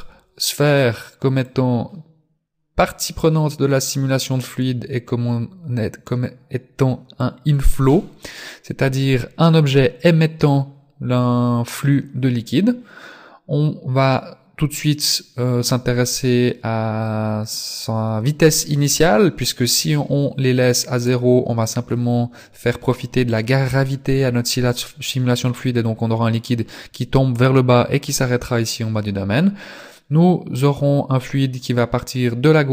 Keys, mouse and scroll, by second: 1.4 click, 4.5 click.